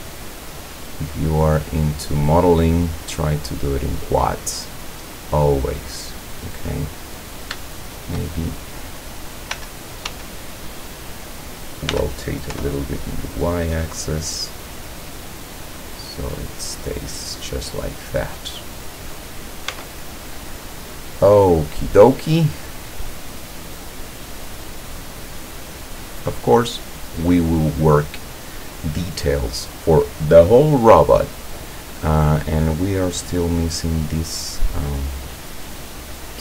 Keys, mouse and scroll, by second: 0.3 middle click, 0.5 scroll down 1, 1.0-3.7 middle drag, 3.8-4.2 scroll up 1, 4.2-5.4 scroll down 3, 5.8-7.1 middle drag, 7.6-8.2 shift+middle drag, 9.6 l, 11.9 r, 13.9 click, 14.2 scroll down 1, 15.1 middle click, 15.6-16.7 drag, 17.4-17.7 scroll up 1, 17.8-18.6 scroll down 2, 19.7 Tab, 20.5 scroll down 2, 23.0-24.0 scroll up 2, 24.0 scroll down 2, 24.4-27.9 drag, 28.0-28.4 scroll down 2, 33.0 click.